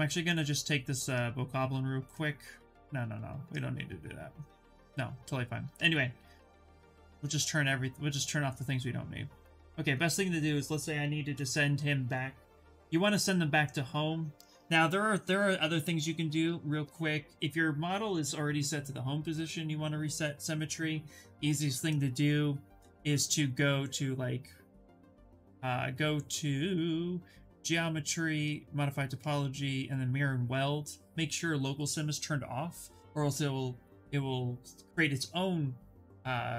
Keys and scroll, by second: 11.0 f, 13.0 s.